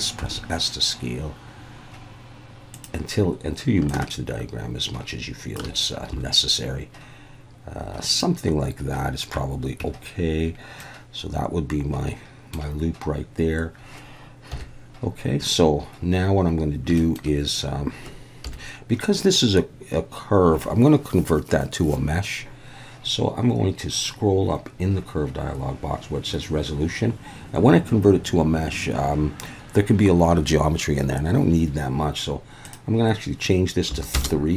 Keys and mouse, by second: 0.2 s, 2.7 click, 3.9-5.5 shift+drag, 6.1 g, 8.1 click, 9.8 Tab, 10.8-12.5 middle drag, 12.4 click, 14.5 KP_1, 17.0 shift+middle click, 18.5 KP_1, 32.7-34.3 drag.